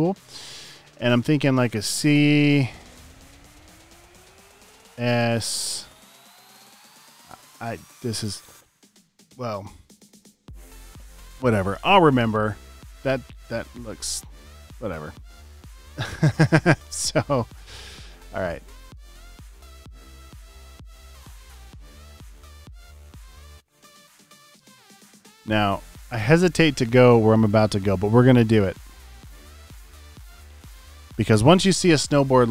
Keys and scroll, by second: 19.4 super+s, 20.3 alt+super+space, 20.8 space, 21.0 space, 21.7 space, 22.0 space, 29.3-30.4 typing.